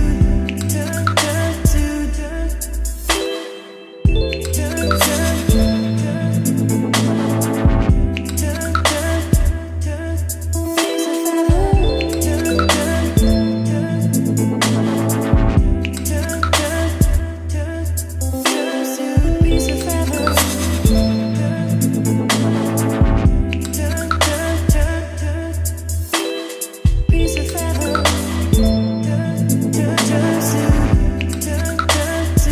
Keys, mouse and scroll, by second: 0.8 click, 1.4-2.8 typing, 2.9 Return, 4.0-5.0 right drag, 5.0-11.0 drag, 10.8-14.3 typing, 17.0-32.5 drag.